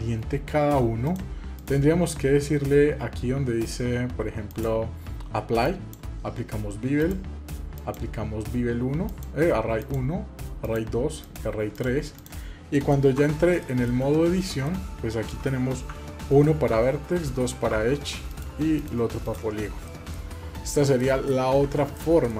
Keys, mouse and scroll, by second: 0.4 Tab, 0.8 click, 1.3 click, 4.2-5.7 drag, 6.8 click, 8.8 click, 10.4 click, 11.5 click, 11.9 click, 12.5 middle click, 13.0 Tab, 13.4 middle click, 13.8 scroll up 1, 14.4 shift+middle click, 15.6 1, 16.5 2, 18.0 click, 18.5 click, 19.0 click, 19.4 scroll down 2, 19.7 middle click, 20.1 scroll up 1, 20.5 scroll down 1, 20.7 middle click, 21.4 Tab, 21.7 middle click, 22.2 shift+middle click.